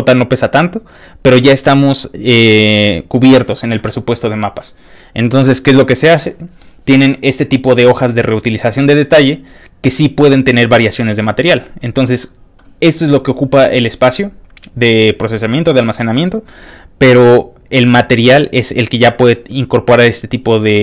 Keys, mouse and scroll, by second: 4.8-5.4 scroll up 2, 5.4-5.8 scroll down 1, 5.8 scroll up 2, 12.2 middle click, 20.2 click.